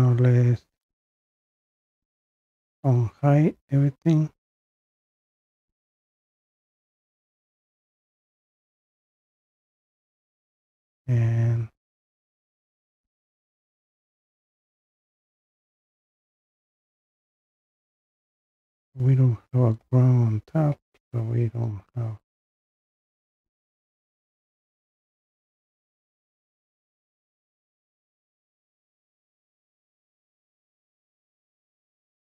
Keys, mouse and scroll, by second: 2.2 click, 11.8-12.7 scroll down 1, 12.7 scroll down 1, 13.3 scroll down 1, 14.4 scroll down 1, 15.9-16.2 scroll up 2, 16.2-17.6 scroll down 2, 18.2-18.6 scroll up 3, 19.9 scroll down 1, 20.9-23.2 scroll up 4, 23.2-25.7 scroll up 1, 25.7-26.7 scroll up 1.